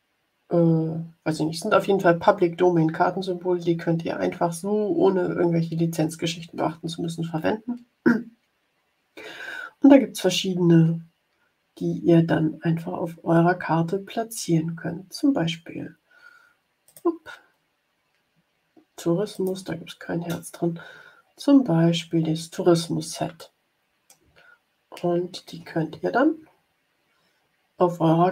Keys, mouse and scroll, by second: 11.1 scroll down 1, 12.3 scroll down 1, 13.0-14.1 scroll down 3, 15.0-16.2 scroll down 3, 16.8 click, 19.3 click, 20.7-21.1 scroll up 1, 21.2-21.8 scroll down 1, 21.9-22.4 scroll up 1, 23.3 click, 23.6 middle click, 24.3-24.8 ctrl+scroll up 2.